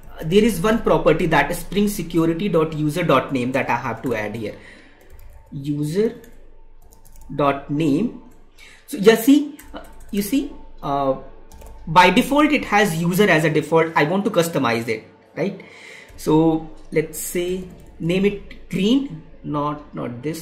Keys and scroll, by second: 16.9 space.